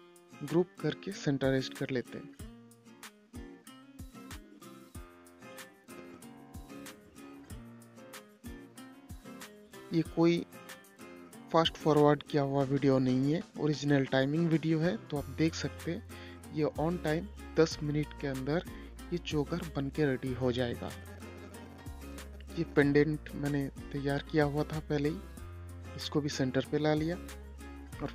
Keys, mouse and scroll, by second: 0.5 ctrl+g, 1.0 shift+click, 2.3 c, 3.6 g, 4.9 shift+click, 5.8 c, 6.7 click, 7.8-8.1 scroll down 1, 10.5 shift+click, 12.2 shift+Page_Down, 13.6 click, 16.9 shift+click, 18.4 ctrl+g, 19.1 click, 23.1-24.0 typing, 24.8 click.